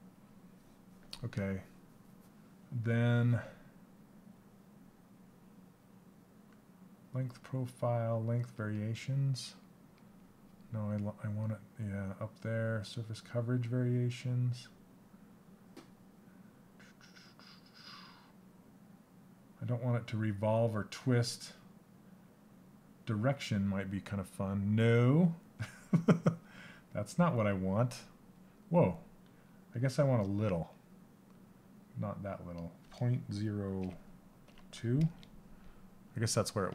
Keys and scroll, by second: 34.7 Return.